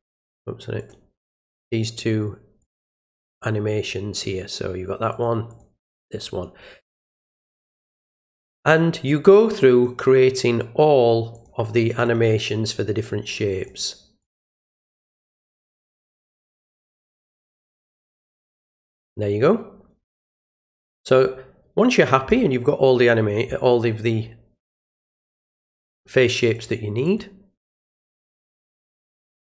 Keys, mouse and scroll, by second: 0.7 click, 1.5 alt+click, 2.6 alt+click, 5.1 alt+click, 5.4 alt+click, 9.0 alt+click, 9.8 click, 11.3 click, 12.0 click, 13.6 click, 14.2 click, 14.9 click, 16.1 click, 17.1 click, 17.7 click, 18.4 click, 26.5 alt+click, 27.0 alt+click, 27.5 alt+click.